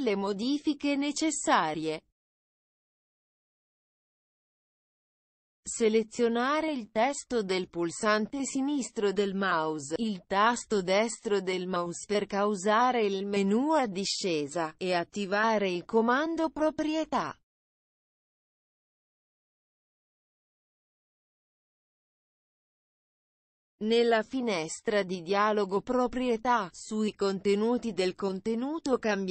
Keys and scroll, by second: 26.9 ctrl+v.